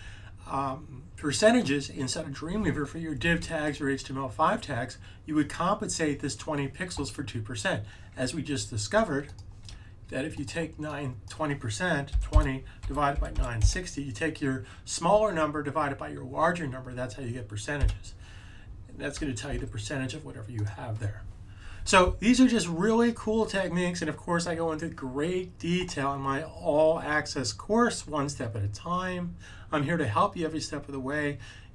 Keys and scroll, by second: 11.8-14.1 typing, 19.4 super+z.